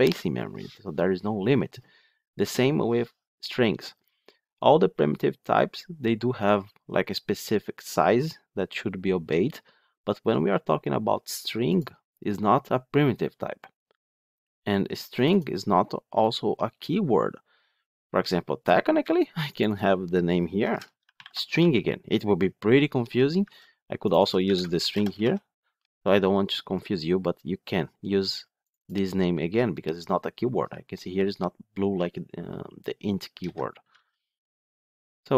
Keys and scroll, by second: 23.3 ctrl+z.